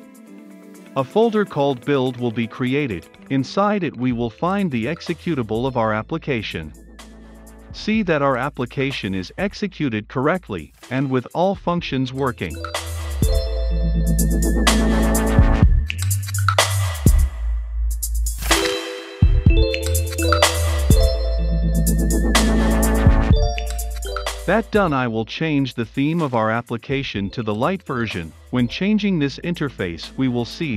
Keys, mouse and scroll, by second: 0.5 click, 27.2-28.8 middle drag, 27.2-28.8 scroll down 2, 30.0 shift+t, 30.2 r, 30.4 u, 30.5 e.